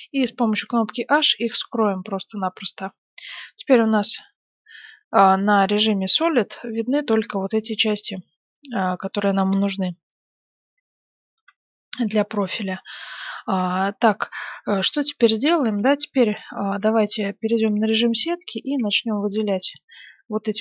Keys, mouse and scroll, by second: 0.5 h, 1.5-3.3 middle drag, 3.9 z, 4.7-9.4 middle drag, 9.5 KP_Divide, 11.3 KP_1, 13.8 click, 14.5-15.6 middle drag, 16.9 z, 17.6-19.2 middle drag, 18.8 a, 19.3 a, 19.5 b.